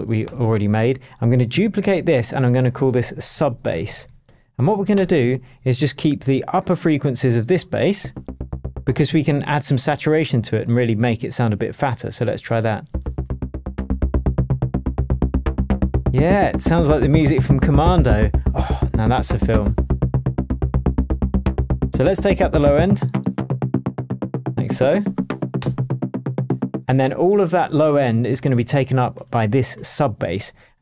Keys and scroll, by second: 0.2 BackSpace, 1.8 super+d, 2.8 super+r, 3.3 shift+super+s, 3.3-5.0 typing, 8.0 space, 12.9 space, 24.4-25.5 typing, 25.6 Return, 26.8 space.